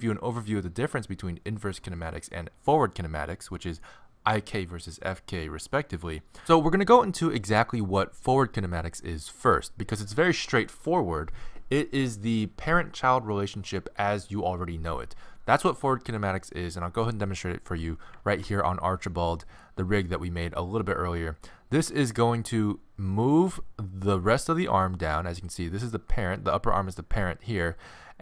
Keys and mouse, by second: 18.3 ctrl+Tab, 19.5 click, 21.9 r.